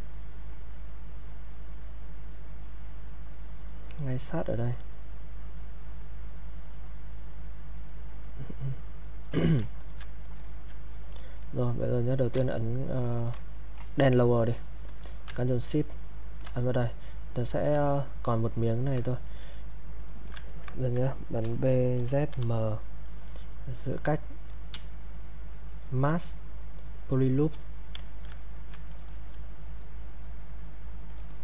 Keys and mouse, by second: 2.7-8.5 drag, 8.5 click, 9.4 alt+click, 9.7 ctrl+right click, 10.4 alt+click, 17.8 ctrl+right click, 19.2 alt+click, 20.2 alt+click, 20.5 ctrl+right click, 21.4 ctrl+b, 22.3 ctrl+m, 24.7 ctrl+space, 28.1 ctrl+alt+click, 28.4 ctrl+right click, 29.1 alt+click, 31.3 alt+click.